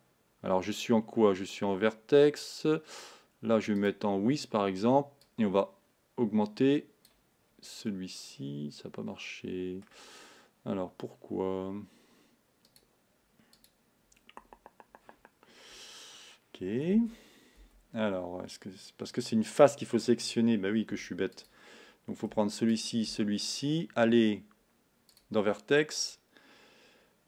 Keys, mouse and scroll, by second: 4.0 click, 5.6-7.5 drag, 7.5-7.9 scroll down 2, 7.9-12.9 middle drag, 12.9 click, 13.7 click, 17.2 Tab, 17.7 Tab, 21.1 3, 21.4 click.